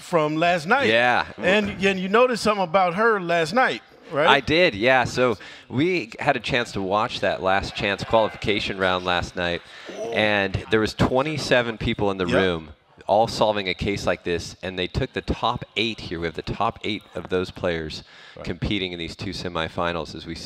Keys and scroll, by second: 2.0-4.6 typing, 6.8 ctrl+Page_Down, 8.1 ctrl+Page_Down, 8.8 ctrl+Page_Up, 8.9 ctrl+Page_Up, 12.6 Down, 15.0 Down, 16.6-18.7 typing, 19.1 Escape, 19.2 Escape, 19.4 Escape, 19.8-20.4 typing.